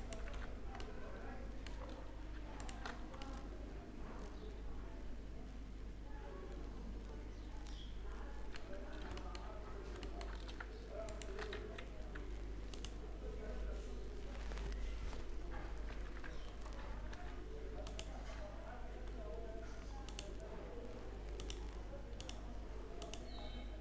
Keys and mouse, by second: 1.1 click, 1.5 middle click, 2.2 right click, 2.5 middle click, 2.8 click, 8.4-11.1 middle drag, 11.1 w, 15.7 ctrl+z, 16.7 w, 19.6 t, 21.8-23.8 drag.